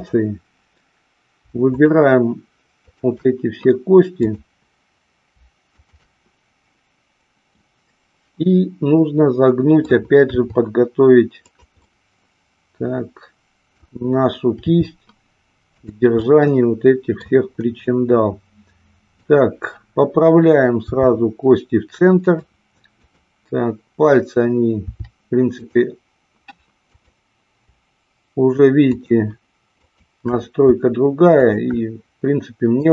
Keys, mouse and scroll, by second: 1.6 shift+click, 4.3 click, 5.8-7.2 shift+drag, 7.5-9.9 middle drag, 10.3 r, 11.9-13.6 middle drag, 14.6 r, 15.8 click, 16.3-17.3 middle drag, 19.2-20.3 drag, 20.9 r, 22.3 click, 23.2-24.3 drag, 24.9 r, 25.5 click, 26.8-28.2 drag, 31.5-32.9 shift+drag.